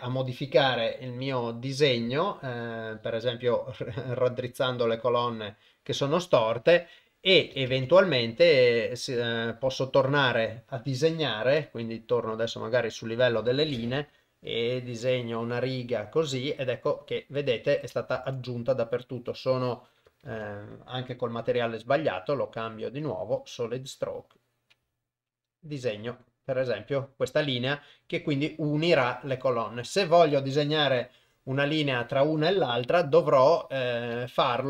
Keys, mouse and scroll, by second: 7.7 ctrl+Tab, 14.6-15.8 drag, 18.3 ctrl+z, 19.0 click, 20.4 ctrl+z, 21.4 u, 24.0 click, 28.8-29.9 middle drag, 30.5-31.5 middle drag, 33.0 KP_7, 34.3 ctrl+middle click.